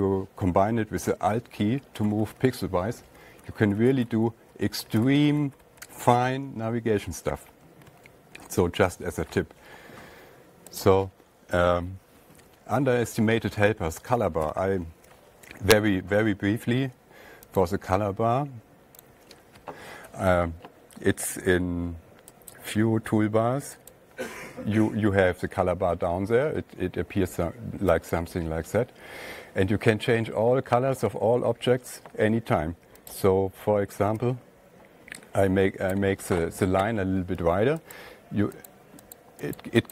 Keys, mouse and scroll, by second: 1.9 alt+Right, 2.1 alt+Right, 2.3 alt+Right, 2.6 alt+Right, 2.7 alt+Right, 2.9 alt+Right, 3.1 alt+Right, 3.3 alt+Right, 3.5 alt+Right, 3.7 alt+Right, 3.9 alt+Right, 4.3 alt+Left, 4.4 alt+Left, 4.5 alt+Left, 4.7 alt+Left, 5.3 alt+Left, 5.4 alt+Left, 5.5 alt+Left, 5.8 alt+Left, 6.1 alt+Left, 6.2 alt+Left, 8.2 alt+Right, 8.4 alt+Tab, 11.3 click, 11.3 alt+Tab, 11.3 click, 14.9 alt+Tab, 15.5 click, 15.7 click, 18.1 click, 19.5 click, 23.0 click, 24.4 click, 28.1-29.3 drag, 34.3-35.9 drag, 39.1 click, 39.7 click.